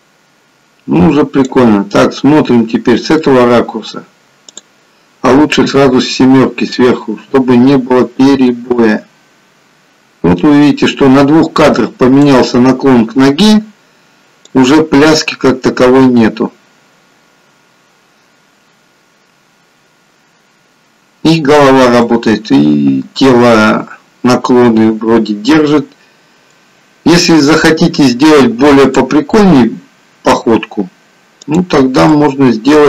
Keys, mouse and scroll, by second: 1.9 middle click, 4.4 click, 5.6 KP_7, 6.8-7.3 scroll down 1, 8.2 click, 14.7 click, 21.9 middle click, 25.5 middle click, 28.8 middle click, 28.8 click, 29.3 middle click, 31.4 click, 32.1 middle click.